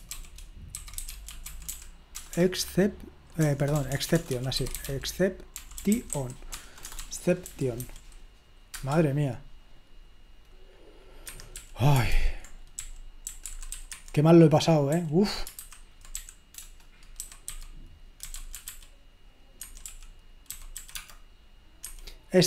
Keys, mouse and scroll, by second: 0.5-2.3 typing, 3.4-6.7 typing, 11.3 Escape, 11.5-15.2 typing, 16.8-21.3 typing, 19.7 Escape, 21.9 Escape.